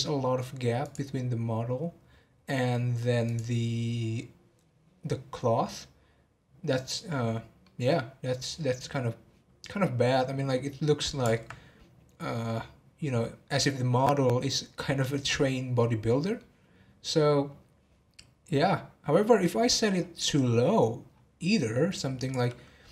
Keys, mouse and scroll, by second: 0.8 click, 3.2 click, 7.6 middle click, 8.4 scroll down 1, 10.3-13.4 middle drag, 15.7-18.8 middle drag, 19.9-21.6 scroll down 23, 22.2-22.9 drag.